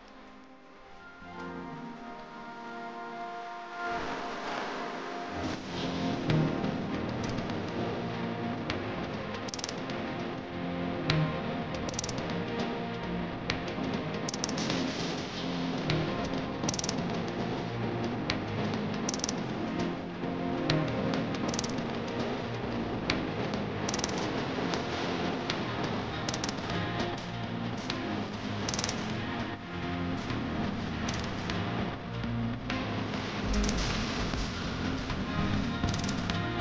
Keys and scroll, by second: 0.1 f, 10.1 Caps_Lock, 11.3 m, 11.9 o, 14.8 space, 15.3 h, 15.8 e, 16.0 space, 26.8 F3, 27.2 Escape, 36.3 c.